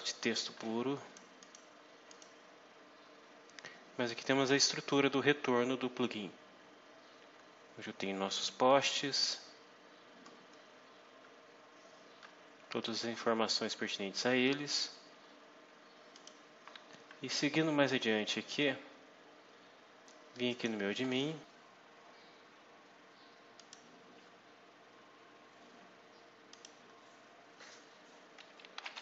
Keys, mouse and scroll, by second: 1.3 click, 2.0 click, 9.0-9.4 scroll down 2, 9.9-10.2 scroll down 2, 10.4-11.2 scroll down 4, 11.6 scroll down 2, 12.8-13.6 scroll down 4, 14.8-15.1 scroll up 2, 16.0 click, 20.4 click, 23.4 click, 25.5 scroll down 2, 26.4 click, 28.4-29.0 typing.